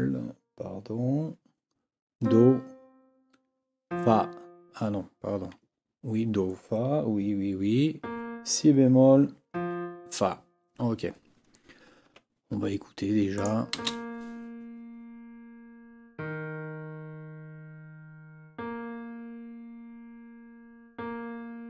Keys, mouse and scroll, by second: 12.0 Escape, 13.3 click, 13.7 space.